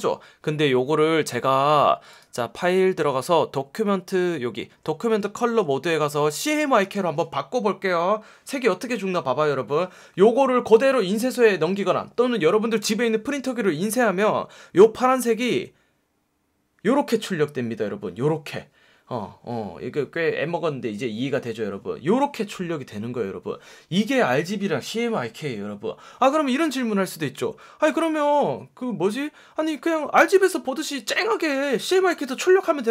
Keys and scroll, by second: 5.4 F1, 6.8 F1.